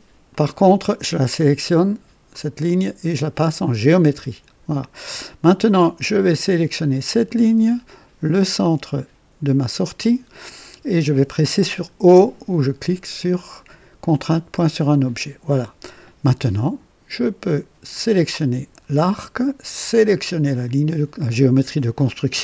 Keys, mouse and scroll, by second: 0.2 click, 2.2 click, 3.5 click, 5.5 click, 7.2 click, 9.8 click, 14.3 o, 17.8 click, 20.3 click.